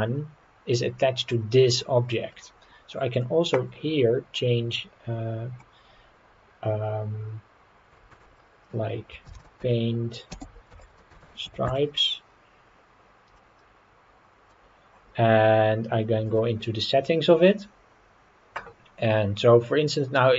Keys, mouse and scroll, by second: 2.1 scroll up 1, 2.5 scroll down 1, 3.1-12.7 drag, 13.4-14.5 middle drag, 17.2 click, 17.7-19.3 scroll down 4.